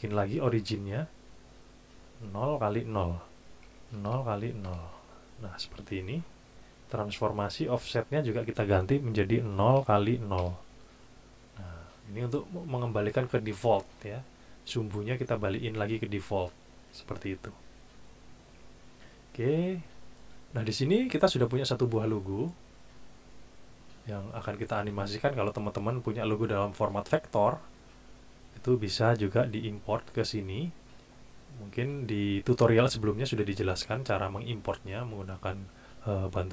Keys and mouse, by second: 0.4 click, 1.6 click, 2.1 click, 3.6 KP_0, 4.0 KP_Enter, 4.3 KP_0, 4.7 KP_Enter, 8.0 click, 8.3 click, 9.5 KP_0, 9.8 KP_Enter, 10.1 KP_0, 10.4 KP_Enter, 21.0 click.